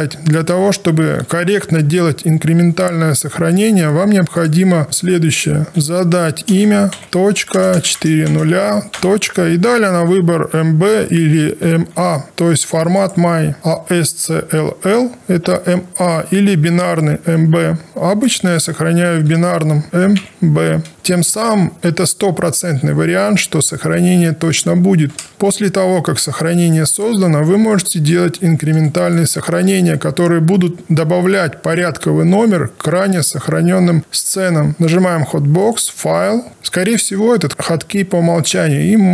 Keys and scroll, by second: 1.2 ctrl+shift+s, 4.8 ctrl+a, 5.7-7.5 typing, 8.9 ., 19.6-20.5 typing, 24.7 Return, 34.7 space.